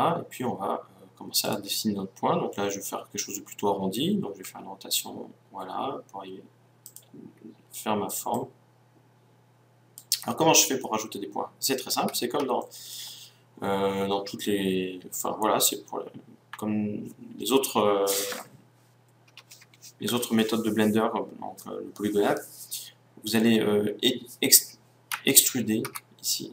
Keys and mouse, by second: 1.5-3.4 drag, 4.4 r, 6.9-10.2 drag, 25.9 e.